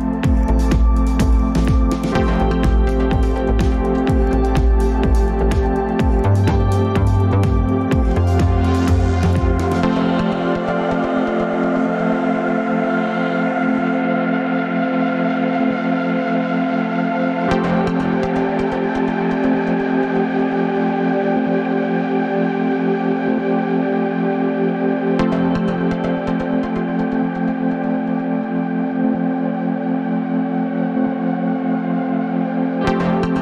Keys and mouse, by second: 2.5 click, 7.4 click, 10.1 g, 13.2 middle click, 15.2-15.9 drag, 23.0 middle click, 24.8 shift+middle click, 26.0-27.5 shift+middle drag.